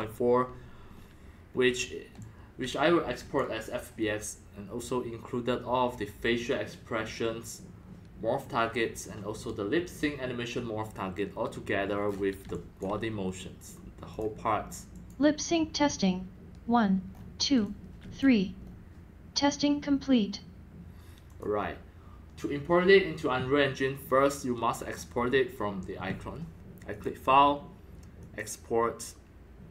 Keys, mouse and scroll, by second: 1.0 scroll up 3, 1.1-1.5 scroll down 2, 1.5 scroll up 2, 1.8 scroll down 1, 1.9-3.6 typing, 2.2-2.6 drag, 3.3-4.7 drag, 6.5-8.4 drag, 12.0-12.4 middle drag, 12.0-12.4 scroll down 6, 12.4 x, 12.5 drag, 12.8-13.8 drag, 14.1 click, 14.9 click, 17.1-17.4 scroll up 5, 17.5 x, 17.6-18.2 drag, 18.0 c, 18.6 scroll up 3, 19.4 middle drag, 19.8 middle click, 20.0 middle drag, 20.4-20.8 middle drag, 21.2 click, 24.1 click, 26.9 click, 28.2 click.